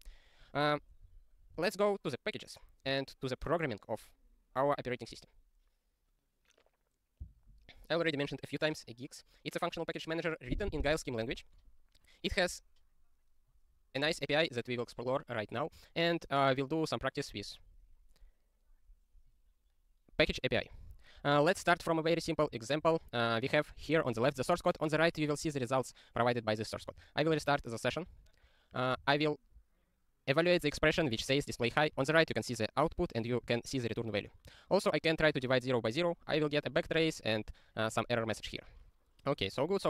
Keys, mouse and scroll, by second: 0.4 click, 1.1 ctrl+a, 17.3 ctrl+s, 18.3 scroll up 1, 19.0 scroll up 1, 19.3 scroll, 20.0 scroll up 1, 20.2-20.7 scroll, 20.7 click, 21.4 click, 21.6 ctrl+p, 22.8 super+o, 23.7 click, 24.0 ctrl+space, 25.5 ctrl+g, 27.0 ctrl+q, 27.4 ctrl+s, 28.2 click, 29.0 ctrl+e, 34.5 ctrl+n, 35.3 ctrl+e, 39.4 click, 39.7 ctrl+n.